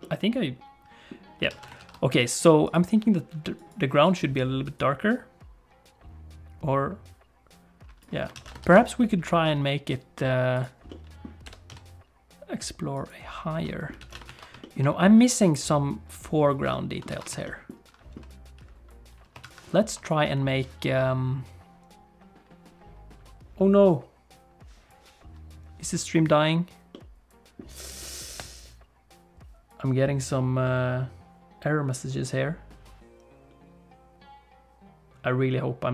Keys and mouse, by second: 0.0-1.1 middle drag, 1.5 alt+a, 1.8 ctrl+s, 2.2 click, 2.7 click, 3.6 click, 8.3 alt+a, 8.6 ctrl+s, 10.6 click, 10.9 middle click, 11.4 g, 13.6 middle click, 14.0 alt+a, 14.3 ctrl+s, 14.6 shift+middle click, 16.7 ctrl+middle click, 17.1 ctrl+s, 17.4 middle click, 19.4 shift+a, 26.9 middle click.